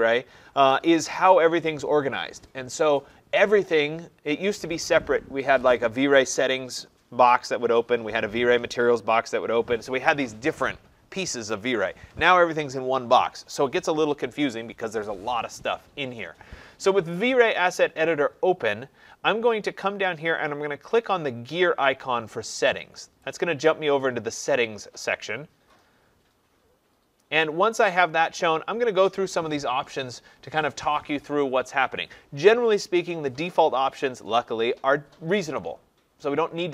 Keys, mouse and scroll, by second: 23.4 click.